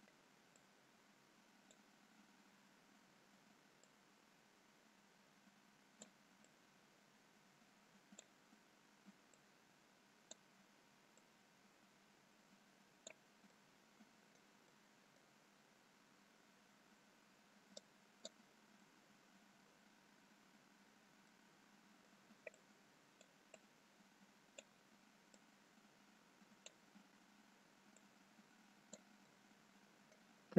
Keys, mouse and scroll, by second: 1.0 click, 7.0 click, 13.9 click, 13.9 middle click, 15.1 middle click, 15.7-16.5 scroll up 2, 16.5-17.0 scroll down 1, 18.4 click, 18.9 middle click, 20.3-21.1 scroll down 1, 21.4 middle click, 25.1 click, 29.2 click, 29.2 middle click.